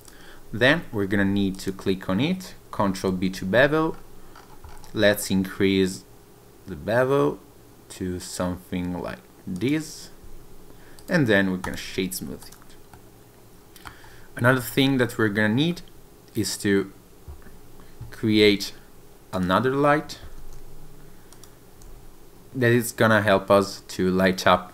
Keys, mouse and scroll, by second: 0.5 Tab, 0.9 scroll up 1, 1.1 Tab, 1.5 click, 3.1 ctrl+b, 3.9-5.1 scroll up 10, 5.7-7.2 scroll up 1, 7.2-8.8 scroll up 2, 9.5 click, 10.2 Tab, 10.9 right click, 12.4 click, 12.9 middle click, 14.5 scroll down 1, 15.7 scroll up 1, 16.4 click, 19.3 click, 20.3 shift+d, 21.3 click, 21.8 r.